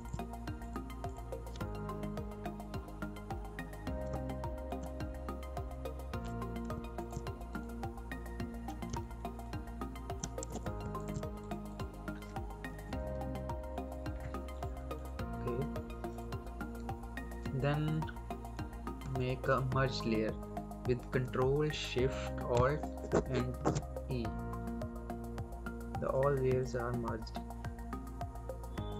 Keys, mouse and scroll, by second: 1.3-1.7 scroll down 1, 1.7-2.2 scroll up 1, 2.7 scroll down 1, 4.0 space, 4.2 click, 4.5 space, 6.6 alt+space, 6.9 click, 7.8-8.2 scroll down 1, 8.2-8.5 scroll up 1, 8.5 scroll down 1, 8.8 space, 8.9 click, 9.5 space, 10.4 alt+space, 10.7 alt+space, 10.9 alt+click, 12.0-12.6 scroll up 1, 12.6 ctrl+scroll up 1, 12.8 ctrl+-, 14.9 click, 18.6 click, 18.9 ctrl+click, 21.2 ctrl+click, 23.5 ctrl+alt+shift+e, 24.9 scroll down 1, 25.2-26.0 scroll up 1, 26.0 click.